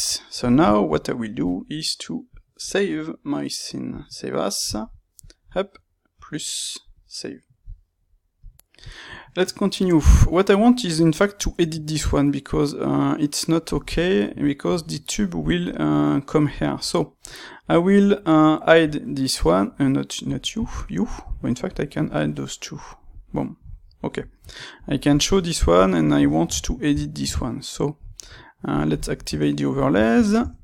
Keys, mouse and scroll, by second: 7.1-8.5 drag, 8.5 n, 9.3 middle click, 12.5 middle click, 13.2-14.3 middle drag, 18.8-20.3 drag, 20.7 click, 21.6 click, 23.1 click, 23.7-24.8 middle drag, 24.8 click, 25.7 click, 26.0-28.6 ctrl+middle drag, 28.6 click, 29.2 Tab, 29.6-30.6 middle drag, 30.3 Tab.